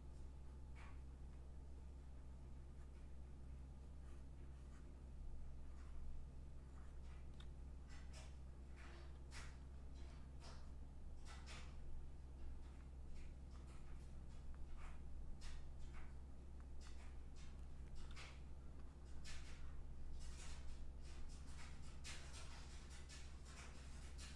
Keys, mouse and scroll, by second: 0.2 click, 1.2 click, 1.6 click, 2.6 click, 2.9 click, 4.3 click, 4.9 click, 8.0 click, 8.7 click, 9.1 click, 11.0 click, 11.5 click, 12.3 click, 12.7 click, 13.8 click, 14.3 click, 14.6 click, 14.9 click, 15.5 click, 16.6 click, 17.0 click, 19.9 click, 20.5 click, 22.4 click, 23.8 click, 24.2 click.